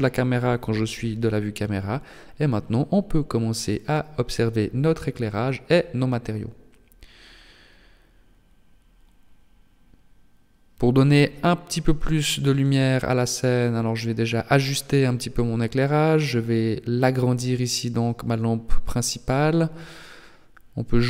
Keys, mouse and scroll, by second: 1.5-4.6 scroll up 1, 6.2 click, 7.8 KP_7, 8.4 scroll down 2, 8.9 shift+middle click, 9.4 scroll up 3, 10.0 shift+middle click, 10.8 right click, 11.9 g, 13.8 z, 15.4 s, 17.6 KP_1, 18.4 scroll down 2, 19.1 shift+middle click, 20.3 g.